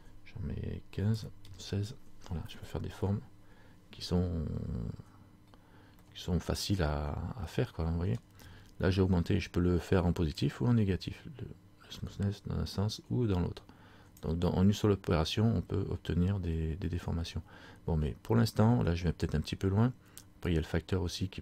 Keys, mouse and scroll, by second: 5.7-6.1 scroll down 1, 6.2 middle click, 10.5 click, 20.7 click.